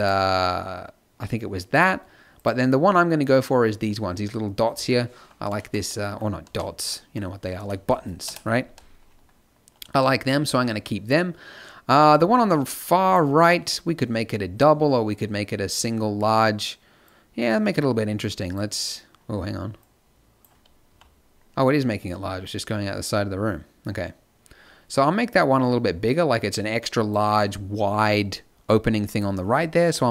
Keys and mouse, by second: 6.4 z, 8.6 z, 11.9 middle click, 20.8 z.